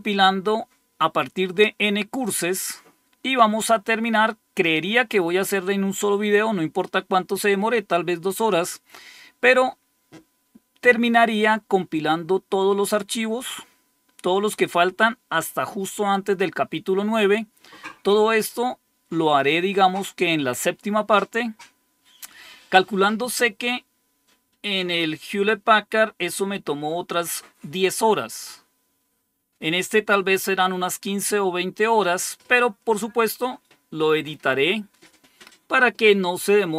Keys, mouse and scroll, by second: 2.3 scroll down 2, 17.8 scroll up 2.